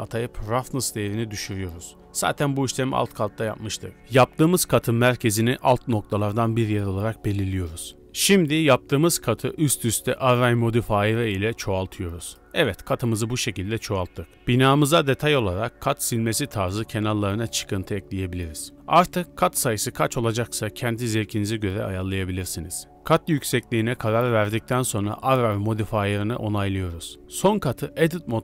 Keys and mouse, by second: 0.7 middle drag, 1.2 Tab, 1.8-2.2 middle drag, 3.3 Tab, 3.6 1, 4.2 shift+s, 4.7 Tab, 5.7 w, 7.9 drag, 8.5 ctrl+a, 9.4-9.8 drag, 10.9 click, 11.6-12.4 drag, 12.7 drag, 13.7 shift+middle drag, 14.0 middle drag, 14.4 ctrl+space, 14.8 shift+middle drag, 15.2 Tab, 16.0 ctrl+r, 17.0 shift+middle click, 17.4 click, 17.7 alt+e, 19.5 click, 20.5 ctrl+space, 20.9 Tab, 21.1 drag, 22.3 click, 22.5 click, 22.7 click, 23.7 drag, 24.5-25.0 middle drag, 25.5-26.6 middle drag, 26.1 ctrl+a, 26.6 drag, 26.8-28.4 shift+middle drag.